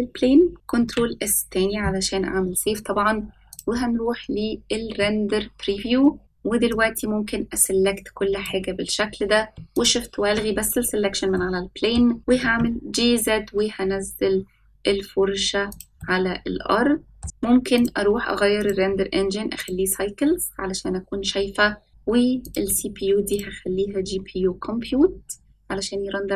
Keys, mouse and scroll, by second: 0.8 ctrl+s, 3.5 click, 5.0-6.2 middle drag, 6.7-8.4 drag, 9.7 shift+click, 11.3-11.9 middle drag, 12.2 g, 16.0-17.2 middle drag, 17.2 g, 17.7 click, 18.6-19.9 drag, 22.5-25.5 drag.